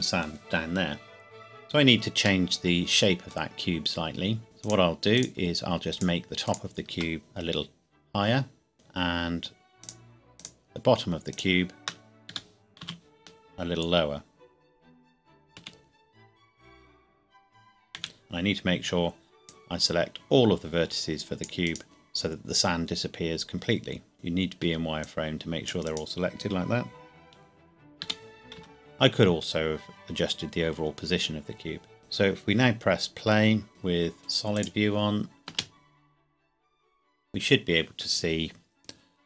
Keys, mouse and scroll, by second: 2.4 middle click, 3.5 Tab, 4.6 click, 5.2 shift+click, 7.2 g, 8.7 click, 9.8 shift+click, 12.3 g, 12.8 z, 15.6 Escape, 18.0 c, 18.1-18.6 scroll down 1, 18.6-19.4 scroll up 1, 19.4 click, 21.6 right click, 21.8 g, 24.1 click, 24.6 c, 25.0 click, 25.8 right click, 28.0 g, 28.6 z, 32.0 KP_1, 34.5 click, 35.5 space, 35.9-36.4 scroll down 1.